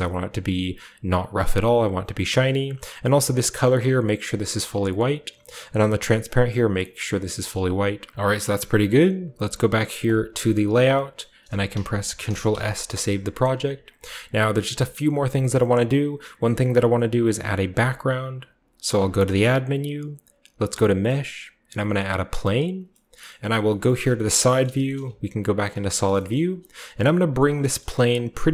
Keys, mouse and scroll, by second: 3.1-4.8 drag, 5.7-9.8 drag, 8.1 ctrl+b, 10.0-11.2 drag, 11.2-12.2 shift+middle drag, 12.2 ctrl+s, 12.7-13.8 shift+scroll up 1, 12.7-14.3 shift+middle drag, 13.8-14.4 scroll up 1, 13.8-16.2 drag, 14.5-16.2 shift+scroll down 1, 14.9-16.2 shift+middle drag, 19.0 shift+a, 22.0-23.3 drag, 22.7-24.4 scroll down 2, 23.3-23.6 middle drag, 23.8-24.4 middle drag, 24.4-25.2 scroll down 2, 24.6 middle click, 24.8-25.5 shift+middle drag, 25.0-25.8 typing, 26.1-27.3 shift+scroll up 1, 26.3-27.3 middle drag, 26.8-28.5 typing, 27.3 shift+click, 27.8 shift+middle click, 27.9 scroll up 1.